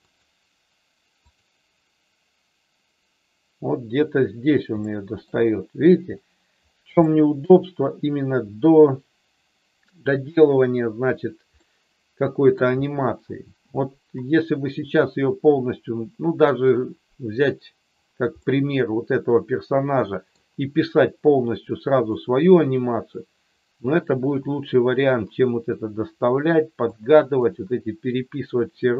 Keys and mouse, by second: 0.2 click, 1.3 click, 4.8 shift+middle click, 7.0 shift+middle click, 11.6 middle click, 18.4-20.2 middle drag, 27.0 middle click.